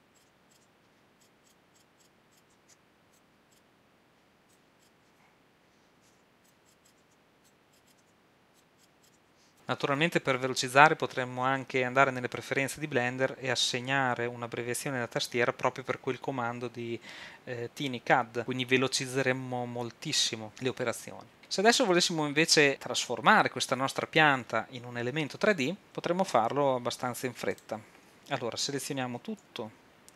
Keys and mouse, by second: 0.1 right click, 1.1-3.2 right drag, 2.6 x, 3.5-4.8 right drag, 4.9-6.6 right drag, 7.0 w, 8.0 w, 9.2 x, 29.5 a.